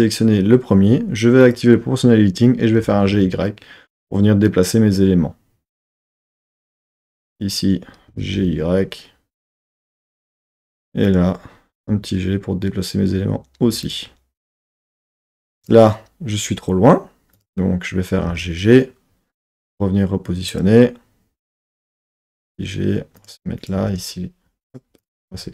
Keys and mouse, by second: 1.5-2.8 drag, 2.8 g, 3.1 y, 6.6 click, 7.2 click, 8.1 g, 8.4 y, 10.4 click, 11.1 click, 11.8 g, 13.8 click, 15.6 click, 17.3 click, 18.1 g, 18.3 g, 20.5 click, 21.6 click, 22.1 g, 23.2 click, 23.6 click, 23.7 g, 24.7 click, 25.2 g.